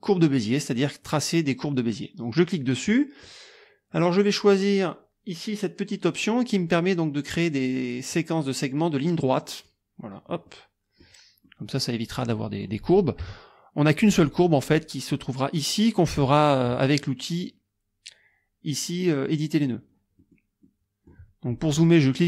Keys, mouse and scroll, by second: 2.4 click, 9.5 click, 10.5 click, 11.5 click, 12.4 click, 13.2 KP_Subtract, 14.5 click, 20.2 click, 20.7 click, 21.5 click.